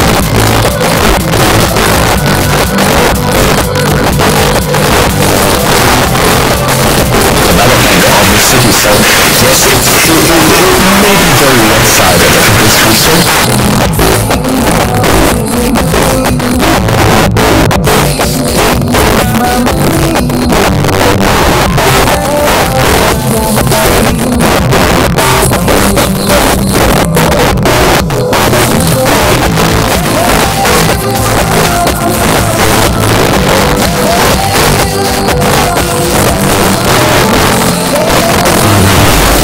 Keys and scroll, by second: 13.3 Page_Down.